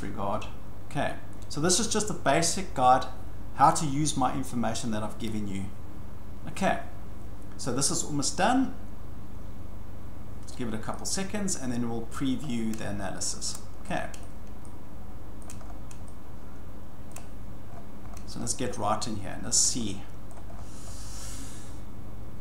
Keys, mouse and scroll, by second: 10.5-10.8 scroll, 12.1 shift+middle click, 12.4-12.8 scroll, 13.6 scroll, 14.2-14.6 scroll, 15.4-16.2 shift+scroll, 16.7 scroll, 17.7-19.8 scroll, 20.3-20.9 scroll.